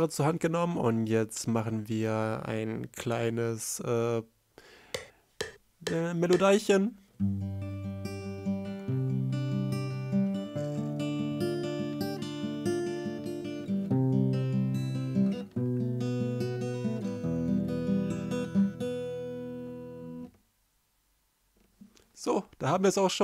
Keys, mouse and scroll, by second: 22.8 space, 22.8 ctrl+m, 23.1 F1.